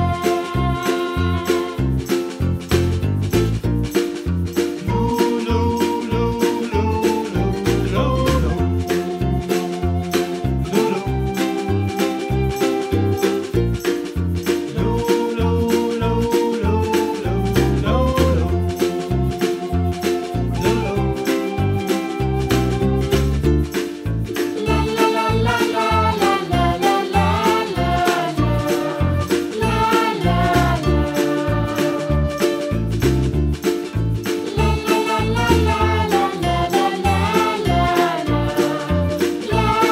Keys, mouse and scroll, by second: 0.7 Tab, 1.0-1.4 right drag, 1.4 scroll down 1, 1.5 scroll up 1, 1.8-2.7 middle drag, 2.7 s, 4.3-4.7 middle drag, 4.7-5.1 scroll up 1, 5.1 KP_Decimal, 5.4-6.4 middle drag, 6.4 Tab, 6.6-7.9 middle drag, 8.1 drag, 8.6 click, 9.0 click, 10.4 middle click, 10.8 scroll up 1, 11.6 alt+click, 12.4 ctrl+z, 13.0 alt+shift+click, 13.4 scroll down 4, 13.6 middle click, 14.0 s, 16.0 s, 17.1 Tab, 17.3-18.4 scroll down 2, 17.4 click, 18.8 click, 19.0-19.5 middle drag, 19.5 scroll up 2, 19.8-20.7 middle drag, 20.7 click, 20.9 Tab, 21.6 s, 24.1 click, 24.7 middle click, 25.3 click, 25.9 middle click, 26.4 click, 27.2 s, 29.4-30.5 middle drag, 30.5 click, 30.8 click, 31.3 Tab, 33.9 scroll up 5, 34.2-35.4 middle drag, 37.0 shift+click, 37.3 shift+click, 37.4 shift+click, 37.9 ctrl+r, 39.1 3, 39.4 click, 39.6 shift+click.